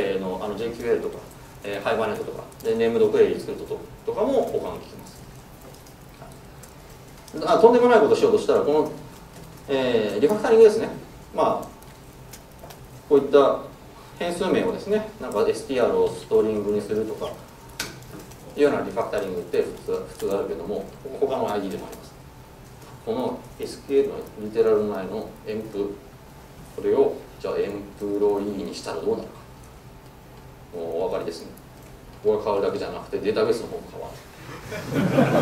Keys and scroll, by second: 10.1 Escape, 14.9 shift+F6, 30.9 shift+F6.